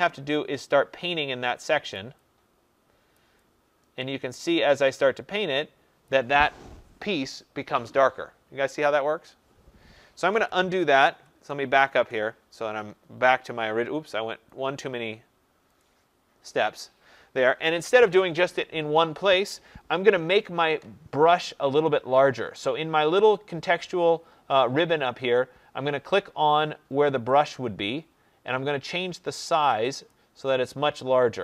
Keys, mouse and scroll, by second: 0.2 click, 1.8 click, 3.1 click, 10.3 ctrl+z, 10.6 ctrl+z, 10.8 ctrl+z, 11.1 ctrl+z, 11.3 ctrl+z, 11.6 ctrl+z, 14.4 click, 27.4 click, 30.0 click.